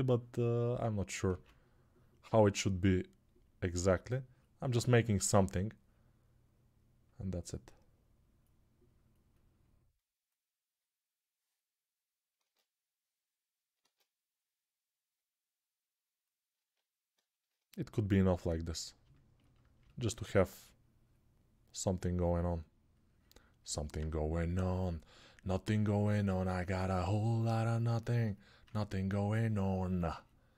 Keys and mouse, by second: 13.7 ctrl+z, 19.3-30.5 alt+drag.